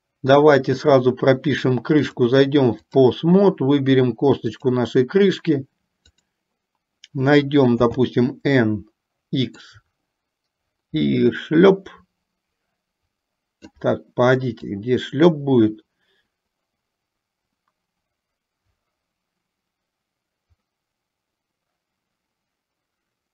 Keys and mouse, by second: 0.8 click, 2.0-3.6 drag, 4.5 click, 7.9 n, 9.8-13.8 drag, 14.9-23.3 drag.